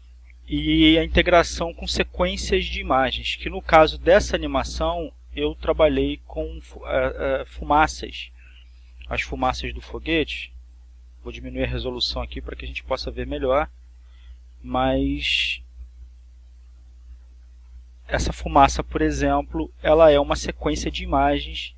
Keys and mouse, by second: 6.8 click, 9.3-10.6 drag, 11.1 click, 11.8 click, 12.8-14.2 drag, 15.4-21.7 drag.